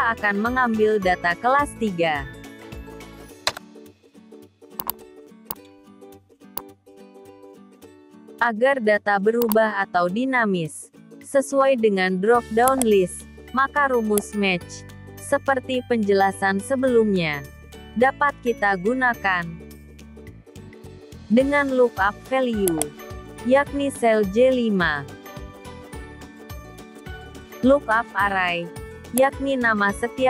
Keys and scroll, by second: 25.3 F4.